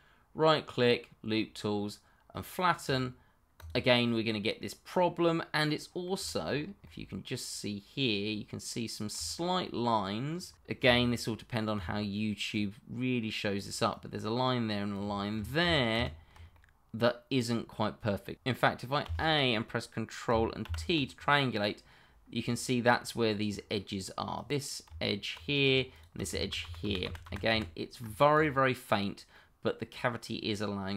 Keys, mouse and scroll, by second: 2.8 click, 4.0 middle click, 4.9 scroll down 1, 5.2 middle click, 6.4 shift+middle click, 6.5-6.8 shift+scroll up 1, 6.8 middle click, 9.2 middle click, 9.4 shift+middle click, 9.8 middle click, 11.7 d, 12.5 click, 13.7 d, 13.9 click, 15.6 ctrl+z, 16.5-18.0 scroll, 18.0 middle click, 20.6 ctrl+t, 22.4 click, 24.9 Tab, 25.5 click, 25.9 shift+click, 26.4 ctrl+z, 28.3 click, 28.8-29.3 scroll up 1, 29.3 middle click.